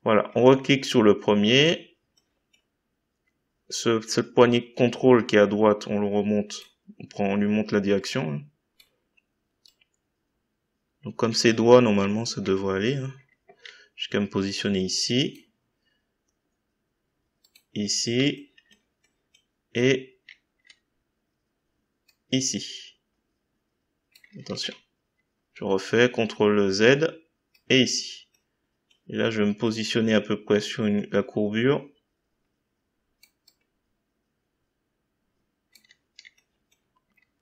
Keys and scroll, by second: 24.5 ctrl+z.